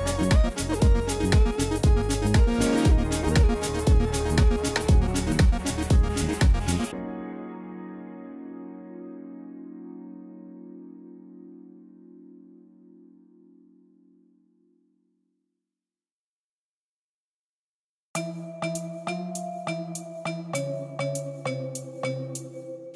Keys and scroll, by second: 2.4 x, 3.3 ctrl+v, 4.9 g, 9.1 Tab, 21.3-22.9 typing.